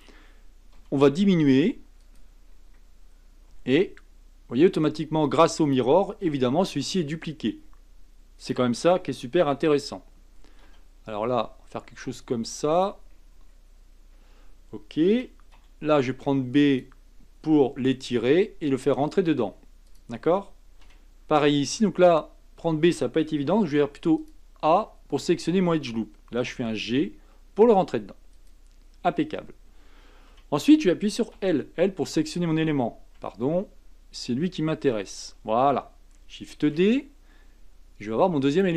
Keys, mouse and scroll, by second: 0.7 s, 2.4-3.5 scroll up 4, 3.5 g, 6.2 r, 10.6 s, 13.1-13.4 scroll up 5, 13.9-15.1 scroll down 2, 15.1 a, 15.5 b, 17.5 g, 20.8 a, 24.2 alt+click, 26.5 g, 28.7-29.4 scroll down 3, 30.3 a, 31.3 l, 33.1 a, 34.9 l, 36.5 shift+d.